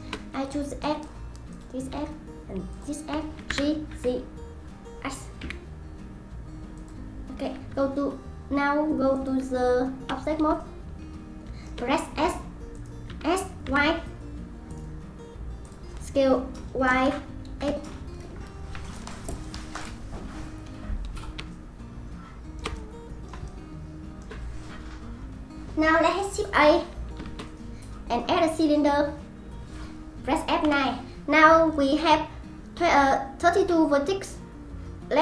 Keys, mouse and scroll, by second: 0.8 click, 1.5 click, 2.7 shift+click, 3.5 g, 7.7 Tab, 8.0 Tab, 9.1 click, 9.4 Tab, 10.6-12.1 shift+middle drag, 12.1 s, 12.7 click, 13.1 s, 15.6-19.3 drag, 21.5-27.0 shift+middle drag, 27.3 shift+a, 30.6 F9.